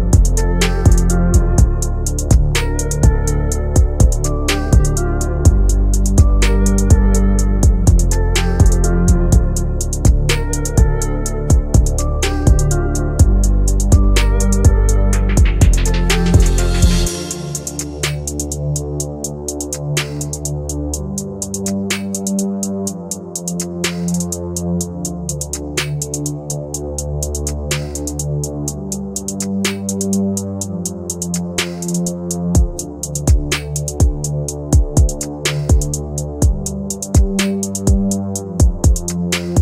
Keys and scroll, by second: 19.1 ctrl+q, 39.1 KP_Add.